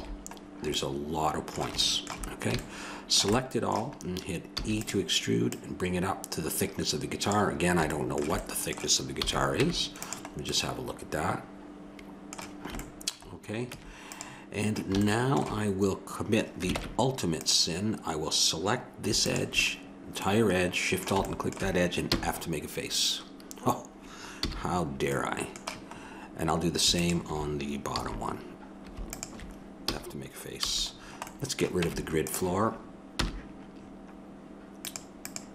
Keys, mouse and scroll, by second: 4.5 e, 5.5-7.4 drag, 9.2 a, 9.6 Tab, 10.3 middle click, 13.7 Tab, 14.7 middle click, 16.7 ctrl+Tab, 19.9-21.0 drag, 21.0-22.0 middle drag, 22.0 f, 24.4 a, 27.0-28.9 drag, 27.9 a, 29.1-30.8 drag, 29.9 f, 30.6 a, 30.8 middle click, 31.9 Tab, 33.2 n.